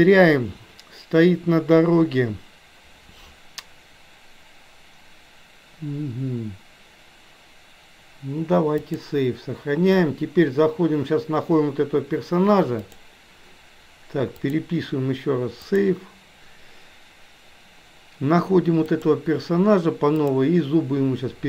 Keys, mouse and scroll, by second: 12.9 click, 14.5-17.5 drag, 19.0 click, 20.3-21.4 drag.